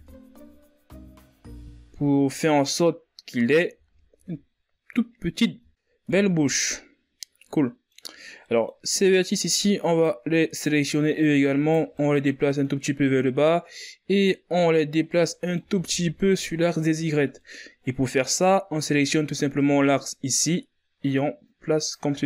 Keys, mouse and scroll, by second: 0.6 Tab, 1.1-2.0 scroll down 7, 2.0 a, 2.6-3.5 scroll up 5, 3.5-4.1 scroll down 2, 4.1-4.5 scroll up 4, 4.5 z, 6.3 z, 6.4 middle drag, 6.5 scroll up 4, 6.8 Tab, 7.2-9.6 middle drag, 9.6 right click, 11.3 right click, 12.7-13.9 middle drag, 13.9 right click, 16.0 middle click, 16.4 ctrl+z, 17.9 scroll down 1, 18.1-20.1 middle drag, 20.1-21.0 scroll up 1, 21.0-22.2 drag.